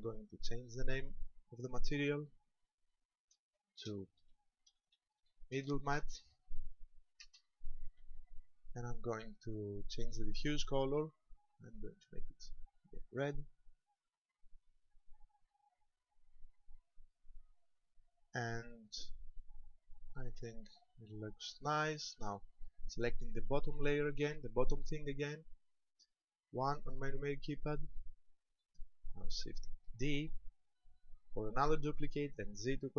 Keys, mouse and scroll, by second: 1.1 click, 10.4 click, 19.2-20.3 scroll down 5, 20.3 scroll down 1, 23.5 right click, 26.1 KP_1, 28.0 shift+middle click, 30.9 shift+d.